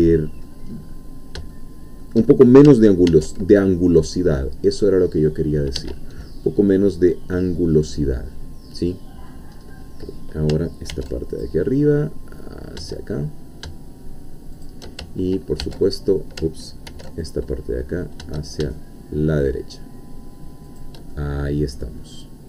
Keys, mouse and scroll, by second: 0.1 middle click, 0.7-1.2 scroll up 1, 1.5 shift+middle click, 3.1 ctrl+r, 5.8 Escape, 6.2 scroll down 2, 6.4-9.4 middle drag, 9.6-10.5 scroll up 2, 10.9 ctrl+r, 11.4 ctrl+click, 14.6 shift+click, 15.6 ctrl+e, 16.9 ctrl+r, 17.2 ctrl+click, 20.7 shift+click, 21.1-22.4 shift+middle drag.